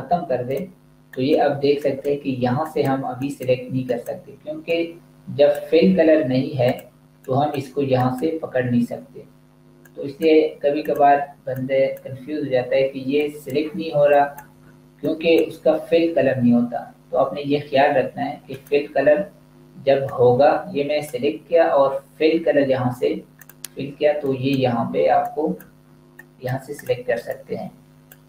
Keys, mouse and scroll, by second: 18.4 click.